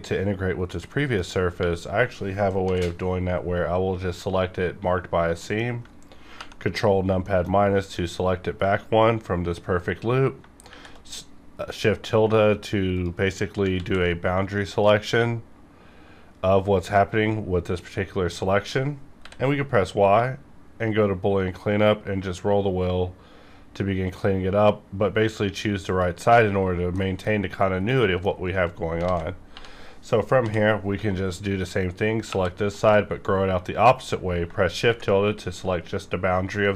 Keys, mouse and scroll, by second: 0.9 middle click, 1.1 scroll down 1, 1.5 3, 2.6 l, 3.0 scroll up 1, 5.4 middle click, 6.3 ctrl+KP_Subtract, 7.3 shift+middle click, 9.9 scroll up 1, 10.6 shift+`, 12.9 click, 13.8 ctrl+z, 14.7 click, 16.8 click, 19.2 y, 20.0 click, 21.2-23.1 scroll up 1, 23.7-25.1 scroll up 1, 25.1-25.6 scroll up 1, 25.8 click, 26.5 scroll down 1, 26.9 middle click, 27.0 middle click, 29.0 alt+a, 29.5 3, 30.3 l, 32.3 ctrl+KP_Add, 34.8 shift+`, 36.5 middle click.